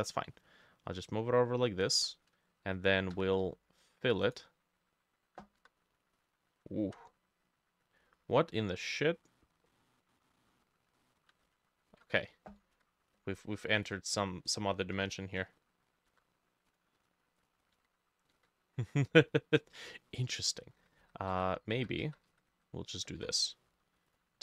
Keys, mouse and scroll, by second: 3.2 f, 5.7 i, 6.9 ctrl+z, 8.0 scroll up 3, 8.4-8.7 scroll down 3, 8.7 middle click, 9.7 middle click, 11.0 middle click, 11.5 ctrl+z, 11.9 ctrl+z, 12.2 middle click, 12.8-14.8 drag, 14.9-16.1 drag, 14.9 i, 15.4 middle click, 16.1 i, 17.8 i, 17.8-20.9 drag, 18.4 i, 19.8 middle click, 20.9-22.9 ctrl+middle drag, 21.0 ctrl+z, 21.4 ctrl+z, 21.8 ctrl+z, 22.1 ctrl+z, 22.3 ctrl+z, 23.2 t, 23.5 middle click.